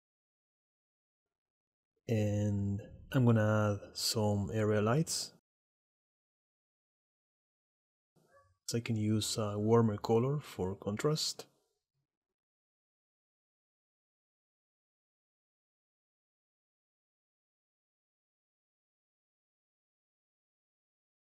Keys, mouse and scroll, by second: 0.5 alt+h, 1.8 shift+a, 5.8 middle click, 6.0 click, 6.3 click, 6.8 click, 11.2-12.3 drag, 12.2 KP_0, 12.9 r, 14.4 click, 14.8 click, 15.2 click, 16.0 middle click, 16.6 click, 17.1 click, 17.4 KP_0, 18.0 click, 18.7 r, 19.9 click, 20.3 click, 20.4 middle click, 20.7 middle click, 20.7 shift+d.